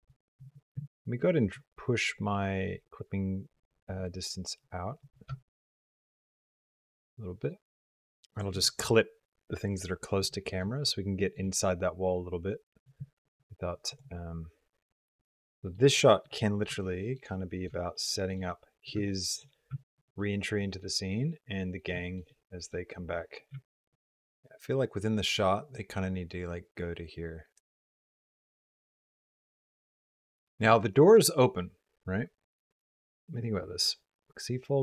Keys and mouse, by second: 4.8-8.3 shift+drag, 10.7 shift+middle click, 11.4-12.8 middle drag, 13.8-15.4 drag, 15.4 middle click, 15.8 ctrl+click, 16.3 click, 16.7 shift+click, 17.2 click, 17.8 shift+click, 18.3 click, 19.0 shift+click, 19.6 shift+middle click, 20.1 middle click, 21.9 shift+middle click, 22.3 middle click.